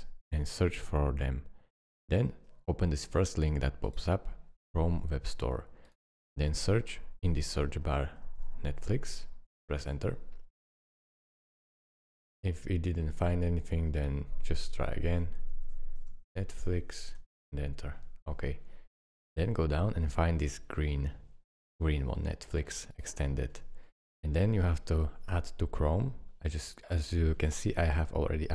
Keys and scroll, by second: 7.6-9.4 typing, 9.9 Return, 14.8-17.2 typing, 17.2 Return.